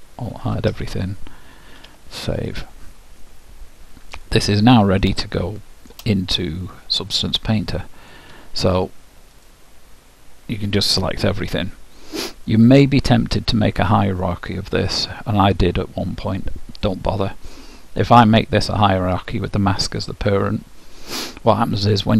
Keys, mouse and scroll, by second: 1.4 Tab, 1.6-3.1 middle drag, 1.8 alt+h, 1.9 ctrl+w, 3.2 middle click, 5.4-7.2 middle drag, 7.6-9.2 drag, 9.5-11.3 drag, 12.9-15.0 middle drag, 18.2-20.1 drag.